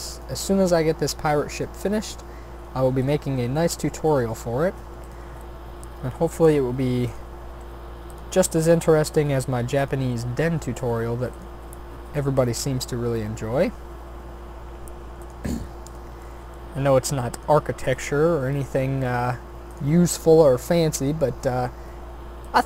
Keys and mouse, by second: 0.4 e, 1.9 s, 3.3 g, 4.3 s, 5.9 e, 7.6 r, 8.4 s, 10.0 g, 11.7 e, 13.9 s, 15.4 g, 18.6 shift+d, 20.1 r, 21.4 e.